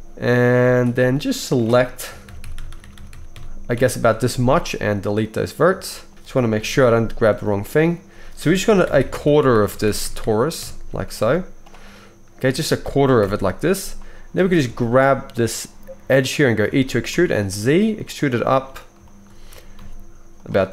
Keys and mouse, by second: 0.6 alt+a, 1.1 shift+click, 2.1 ctrl+KP_Add, 4.3 x, 5.1-12.4 middle drag, 6.1 ctrl+z, 6.6 KP_3, 11.1 x, 12.4 click, 12.5-19.5 ctrl+middle drag, 13.1 ctrl+l, 14.4 alt+a, 16.8 e, 19.5 g.